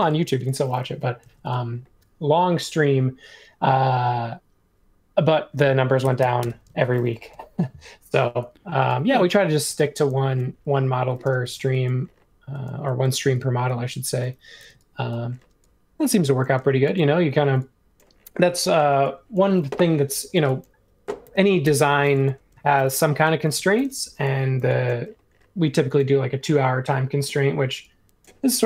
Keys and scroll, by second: 0.0 super+z, 0.0-1.0 typing, 5.7-7.3 typing, 9.6 w, 10.3 super+1, 11.0-11.4 typing, 14.6 super+z, 16.6 space, 17.4 e, 18.8 space, 21.2 super+c, 21.6 BackSpace, 23.4 shift+v, 24.2 e.